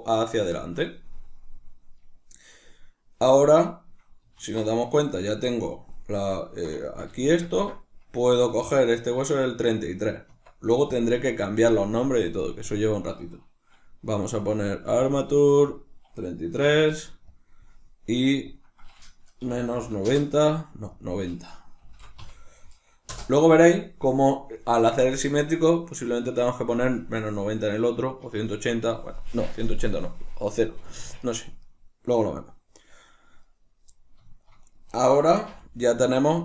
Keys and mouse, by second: 0.3 click, 0.5-11.3 shift+middle drag, 4.4 alt+o, 10.3 Tab, 11.3 right click, 16.8-24.5 drag, 16.8 3, 20.1 Return, 23.2 Return, 24.5-34.7 middle drag, 34.7 right click, 35.5-36.4 middle drag, 35.5 g.